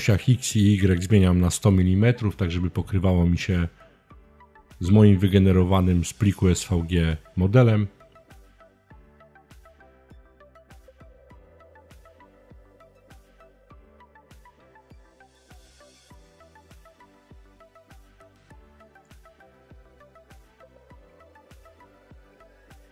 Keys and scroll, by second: 0.3-1.5 typing, 8.5-9.1 typing, 10.4 Return.